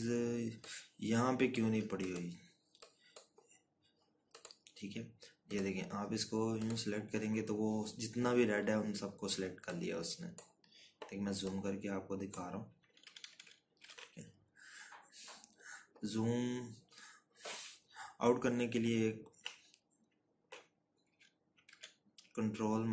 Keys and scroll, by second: 11.2 z, 14.9 ctrl+-, 15.1 ctrl+-, 15.2 ctrl+-.